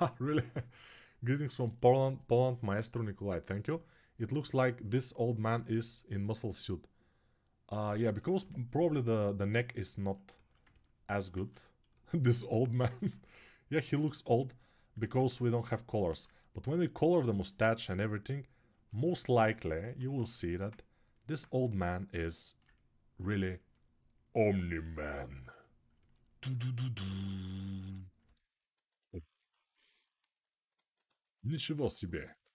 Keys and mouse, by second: 9.9-12.2 alt+shift+right drag, 11.3 alt+q, 12.2-20.8 alt+drag, 12.6 alt+q, 14.8 alt+q, 16.0 alt+q, 19.6 1, 20.8-23.2 alt+right drag, 24.8 1, 24.8 2, 26.8 g, 27.9 ctrl+alt+click, 30.5-32.5 alt+shift+drag.